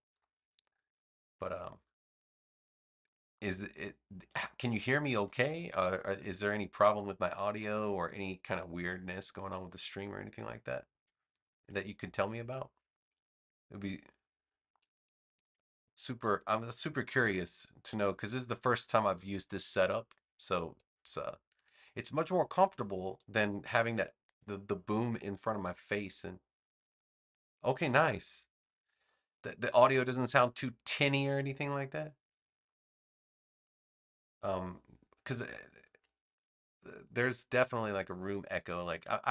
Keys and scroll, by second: 0.5 space, 11.5 space, 15.3 space, 19.1 space, 21.4 space.